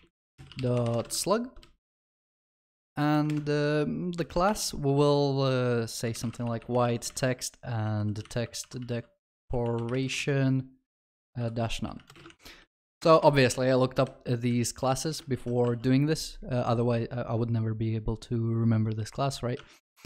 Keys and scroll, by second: 1.3 ctrl+s, 4.5 Return, 8.9 ctrl+s, 12.3 ctrl+s, 15.3 ctrl+alt+shift+l, 15.7 ctrl+s.